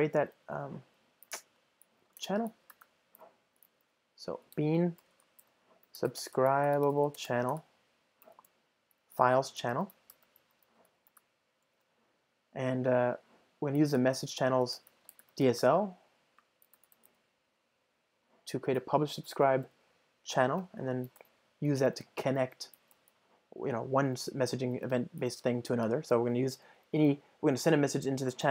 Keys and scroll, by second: 5.1 Return, 19.5 Return, 21.2 Return, 28.0 ctrl+alt+shift+Right.